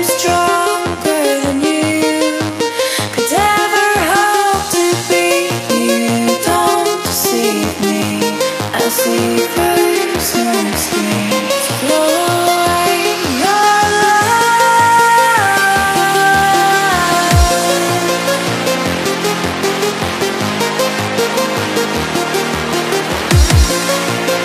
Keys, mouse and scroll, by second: 0.4-0.7 scroll up 2, 0.9 click, 2.2 Delete, 2.6 click, 2.9-4.4 typing, 3.3 click, 4.3 click, 6.2 Return, 6.3 Right, 6.7 Up, 6.9 click, 17.3 right click, 17.9 click, 18.3 ctrl+click, 18.5 right click, 19.1 click, 21.0 alt+scroll down 1, 21.4 click, 21.8 scroll up 1, 22.2 click, 23.1 right click, 23.3 click.